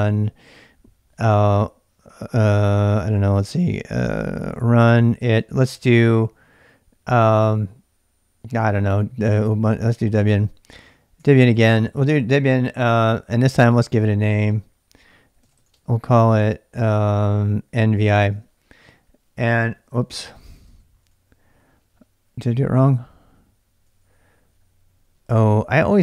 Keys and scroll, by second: 2.1-6.2 typing, 10.1-12.0 typing, 13.7 space, 13.9 -, 15.2-16.0 typing, 17.9-22.5 typing, 23.9 l, 25.3-26.0 typing.